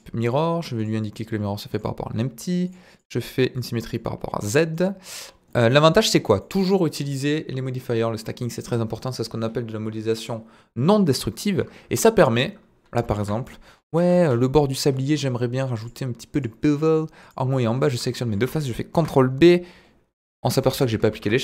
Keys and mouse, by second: 2.6 click, 2.9 click, 3.5 click, 3.8 click, 4.5 middle drag, 5.5 middle drag, 6.4-6.9 middle drag, 13.1 KP_1, 13.9 Tab, 14.4 middle click, 15.8 click, 16.9 middle click, 17.5 middle click, 17.9 shift+click, 18.1 middle click, 18.9 ctrl+b, 20.4 Escape, 20.7 Tab, 21.1 ctrl+a.